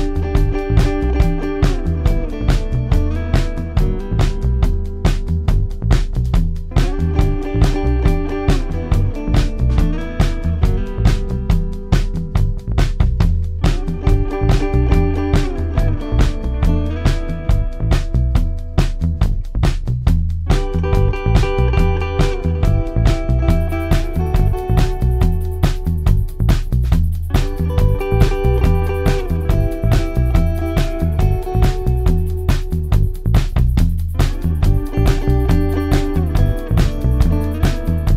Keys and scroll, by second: 4.2-5.1 typing, 15.6-17.4 typing, 19.3 4, 25.3 ctrl+d, 25.4 Escape, 26.9 1, 27.0 Return, 29.4 ctrl+d, 29.7 Escape, 32.9 ,, 35.0 ctrl+d, 35.1 Escape, 35.3 ,.